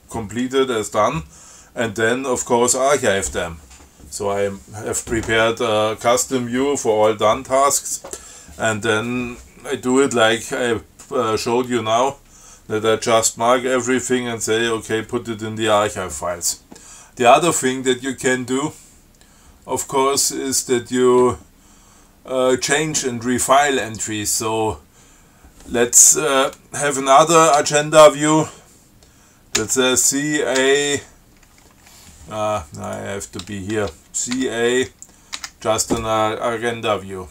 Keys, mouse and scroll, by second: 20.1 click, 29.8 ctrl+c, 30.8 a, 33.1 click, 34.0 ctrl+c, 34.6 a, 35.6 a.